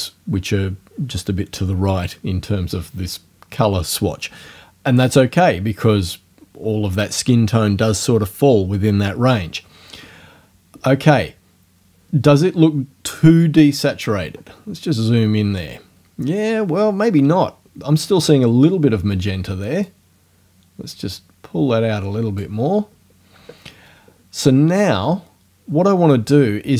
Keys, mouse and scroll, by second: 14.1 scroll up 2, 19.9 click, 24.5-25.3 scroll down 4.